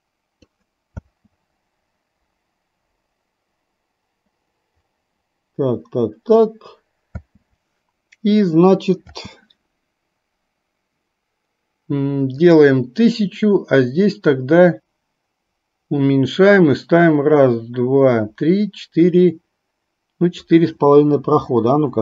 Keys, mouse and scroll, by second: 1.1 space, 9.2 space, 12.4 click, 14.3-20.6 drag.